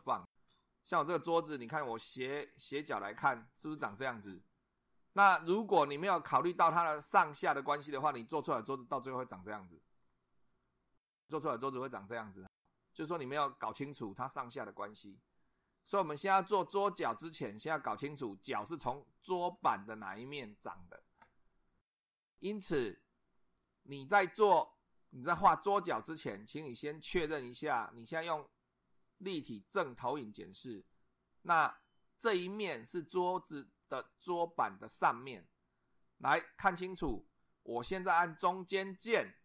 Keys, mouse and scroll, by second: 0.0 2, 1.6 click, 3.3 click, 7.9-10.8 middle drag, 10.1 click, 10.1 right click, 11.1-12.4 middle drag, 12.7-13.4 middle drag, 19.6 click, 30.0 click, 32.4 click, 34.1 click, 39.1-39.4 middle drag.